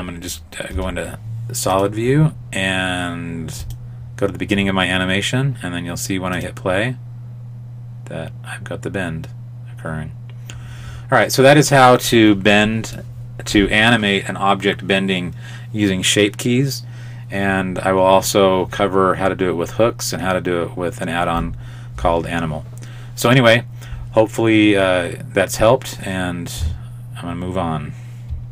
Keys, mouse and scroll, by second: 0.8 z, 3.6 click, 6.4 click.